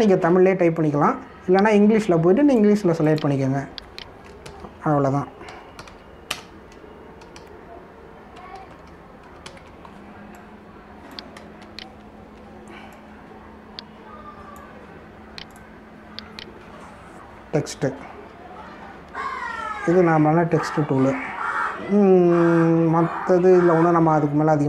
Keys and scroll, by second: 5.4-10.4 typing, 12.6 ctrl+-, 20.1 ctrl+=, 20.6 ctrl+-.